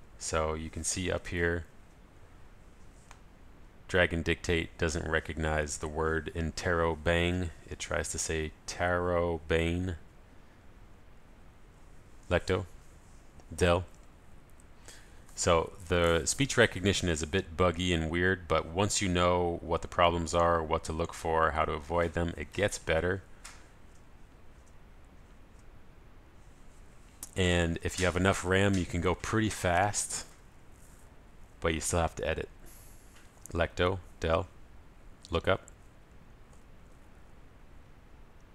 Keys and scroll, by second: 13.0 ctrl+alt+shift+super+a, 34.8 ctrl+alt+shift+super+a, 35.9 ctrl+alt+super+s, 36.0 super+l, 36.1 super+v.